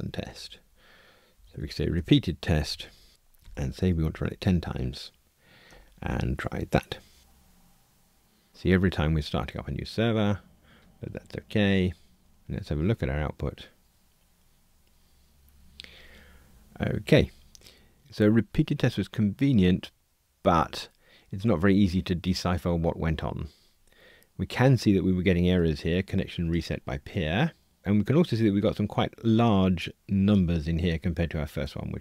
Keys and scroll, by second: 2.0 Return, 2.6 alt+shift+Right, 4.3 Escape, 7.2 ctrl+r.